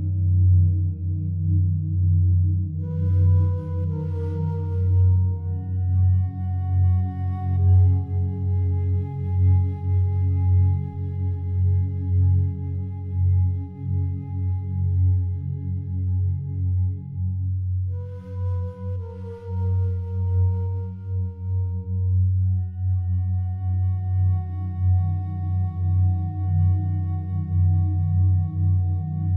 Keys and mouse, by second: 0.0 click, 3.3 click, 4.0 drag, 5.3 click, 6.5 click, 7.3 click, 8.5 click, 10.5-12.0 drag, 12.7 click, 14.2 typing, 15.2 click, 16.8 click, 17.0 click, 17.9 click, 18.7 typing, 22.5 Escape, 24.2 click, 25.1 click, 27.8 click, 29.0 click.